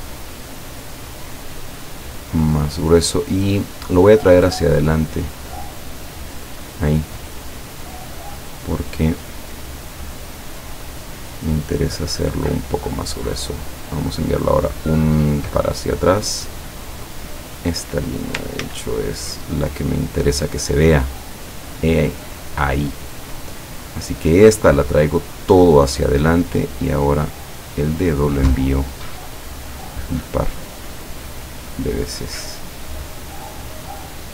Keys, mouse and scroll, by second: 3.7 click, 4.8 click, 5.6 click, 6.1 click, 8.4 click, 10.3 click, 11.3 click, 13.7 click, 14.6 click, 15.0 click, 16.7 click, 18.6 ctrl+z, 21.0 click, 23.9 click, 25.4 click, 26.7 click, 27.3 click, 28.9 click, 29.4 click, 30.1 click, 30.6 click, 33.8 click, 34.2 click.